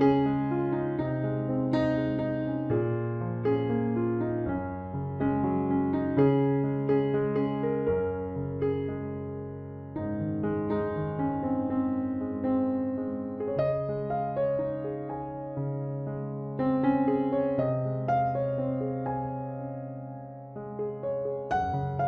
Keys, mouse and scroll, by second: 0.5 Tab, 0.9 Tab, 1.4 ctrl+s, 4.8 Tab, 7.0 right click, 7.3 c, 10.3 e, 12.3 e, 13.8 s, 15.4 click, 16.6-17.8 middle drag, 18.3 click, 19.0 KP_Decimal, 20.3 e, 21.4-22.0 typing.